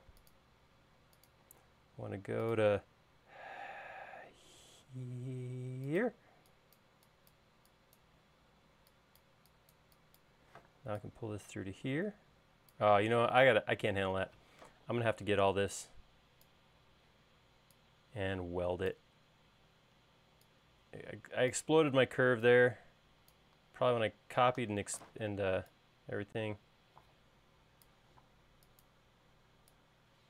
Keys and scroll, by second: 1.9 l, 6.6 e, 11.1 p, 14.5 super+z, 15.4 space, 25.5 p, 28.0 Escape, 28.7 space.